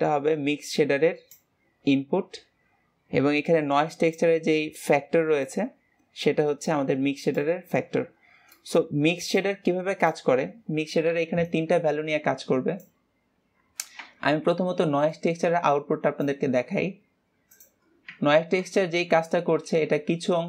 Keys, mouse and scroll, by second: 4.1-18.0 drag, 19.1 scroll up 1, 19.9-20.3 scroll down 1.